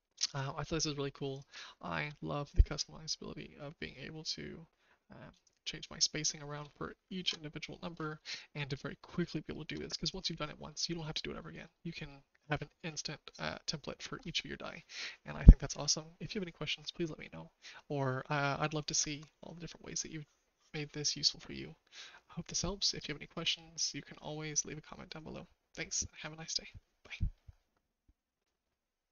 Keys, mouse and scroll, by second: 1.7 shift+middle click, 5.4-6.5 shift+drag, 7.2 ctrl+z, 8.3-9.6 shift+middle drag, 11.6 middle click, 12.0 shift+middle click, 13.1-14.1 shift+middle drag.